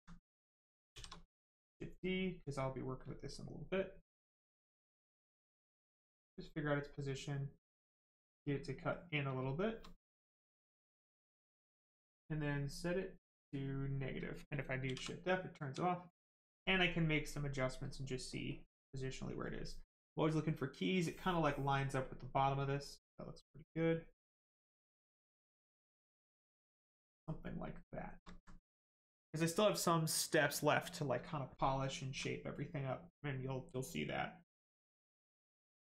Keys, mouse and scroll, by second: 0.9 shift+d, 1.3 right click, 4.3 shift+click, 6.5 right click, 8.1 click, 9.1 right click, 13.0 click, 13.6 right click, 14.8 shift+f, 15.1 right click, 16.6 shift+click, 22.0 click, 24.3 right click, 25.9 click, 27.4 right click, 28.3 alt+right click, 31.7 alt+right click, 32.5 right click, 32.5 right click.